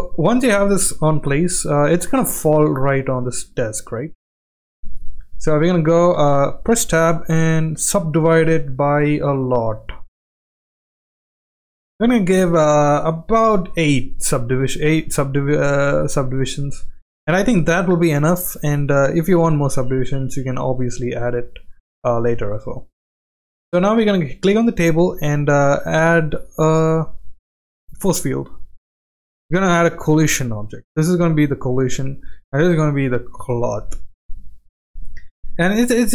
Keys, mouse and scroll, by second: 3.9 click, 4.8 click, 6.2 Tab, 7.0 right click, 10.0 click, 10.2 click, 10.4 click, 11.0 click, 12.0 middle click, 13.6 click, 13.9 click, 15.1 Tab, 15.6-16.3 middle drag, 16.6 click, 17.5 click, 19.3 click, 21.3 click, 21.7 click, 22.2 click, 22.5 click, 23.9 click, 24.3 click, 26.5 click, 26.8 click, 27.7 click, 30.0 click, 32.0 click, 33.7 click.